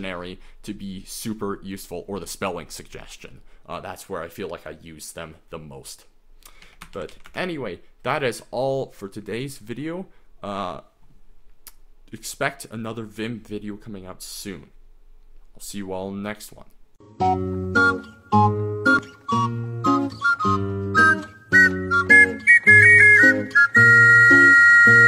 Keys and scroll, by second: 6.7 Escape, 6.7-7.6 typing.